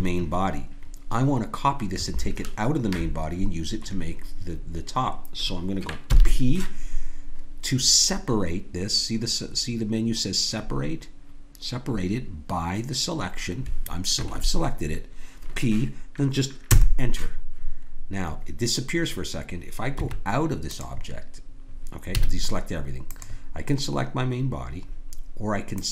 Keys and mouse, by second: 6.1 p, 19.9 Tab, 22.1 a, 23.1-25.3 drag, 25.7-25.9 drag.